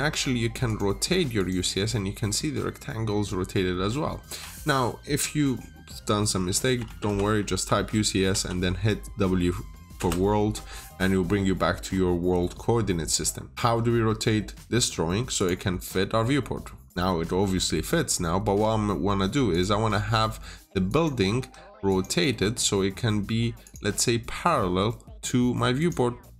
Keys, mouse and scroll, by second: 6.4-6.8 typing, 7.4 Return, 11.8-15.2 scroll up 1, 15.2 click, 15.8-16.3 scroll down 1, 16.3 scroll up 1, 16.7 scroll down 1, 16.9 middle click, 17.9-18.3 scroll up 1, 18.3 typing, 19.4 click, 21.3 Escape, 21.8 click, 22.2 typing, 22.3 Return, 22.4 Return, 22.5 Tab, 23.5 click, 23.8 scroll down 1, 25.7 click.